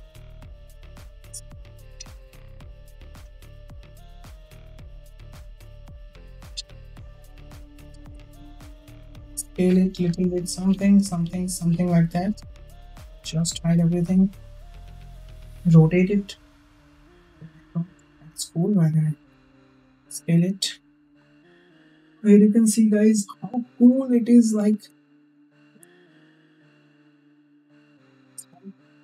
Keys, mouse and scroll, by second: 7.6 click, 8.7 s, 10.5 s, 14.0 shift+drag, 15.3 r, 19.7 s, 21.7 space, 23.6 click, 23.6 space, 24.7 h, 26.0 space.